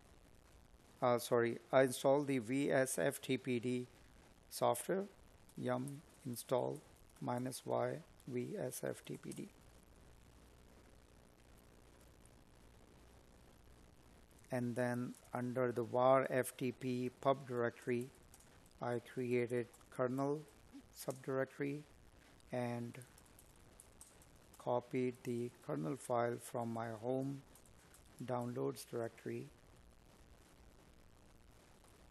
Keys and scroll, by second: 4.5 space, 5.5 space, 5.9 space, 13.6 space, 17.9 space, 21.6 space, 22.2 Tab, 23.8 space, 27.5 Tab.